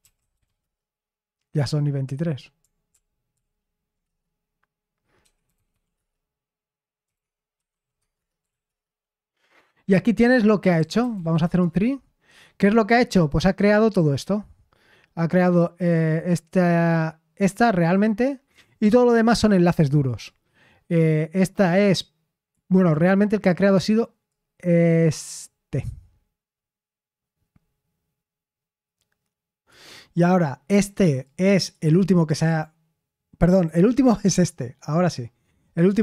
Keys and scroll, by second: 0.0-0.9 typing, 2.8 ctrl+p, 3.3 ctrl+p, 4.0 Return, 4.9-8.9 typing, 10.5-11.7 typing.